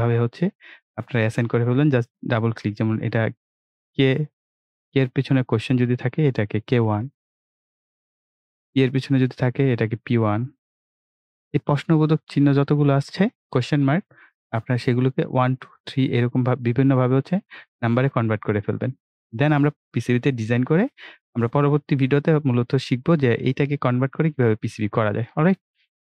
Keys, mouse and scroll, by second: 2.1 click, 6.9 BackSpace, 9.1 click, 13.7 BackSpace, 15.7 click.